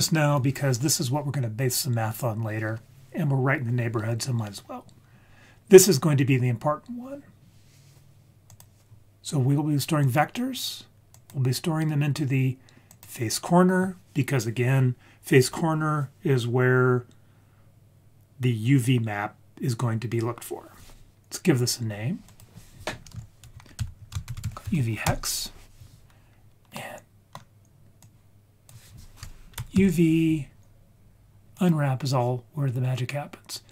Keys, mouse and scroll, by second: 0.0 click, 8.5-10.2 drag, 11.1-13.0 drag, 22.3-25.1 drag, 26.8 middle click, 28.0-31.6 drag.